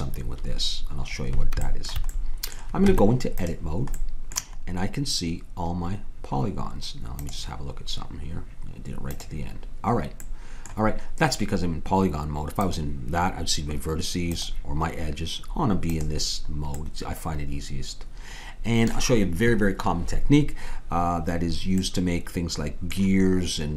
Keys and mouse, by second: 2.9 Tab, 10.2-12.6 middle drag, 12.6-17.7 drag, 17.7 middle click, 21.9-23.7 middle drag.